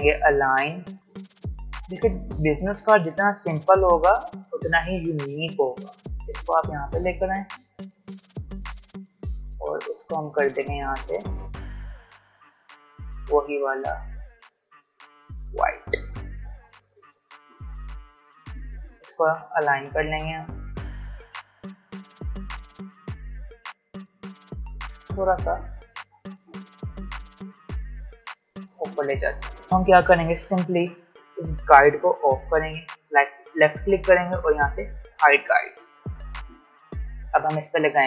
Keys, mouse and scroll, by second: 1.2-1.6 alt+scroll down 1, 2.6-14.1 drag, 16.3 v, 17.0 click, 18.0-18.4 alt+scroll up 1, 18.5 click, 19.1 shift+click, 21.1 shift+Up, 21.3-23.7 alt+shift+drag, 24.9 shift+Up, 26.3 Up, 28.7 click, 29.7 alt+scroll down 1, 29.8-30.3 alt+scroll up 1, 32.8 right click, 34.6 click, 36.7 space, 37.0 click, 37.2 space.